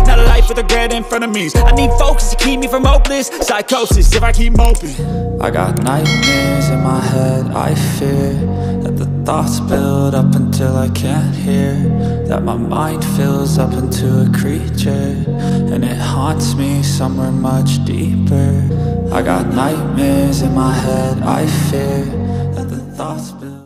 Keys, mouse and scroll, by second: 0.0 ctrl+click, 3.5 ctrl+click, 4.4 ctrl+click, 7.2 click.